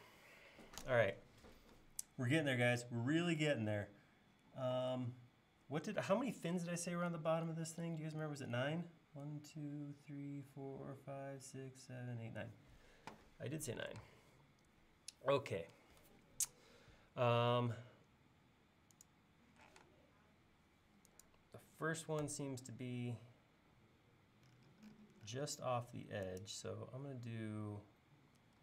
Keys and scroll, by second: 14.1 space, 19.8 m.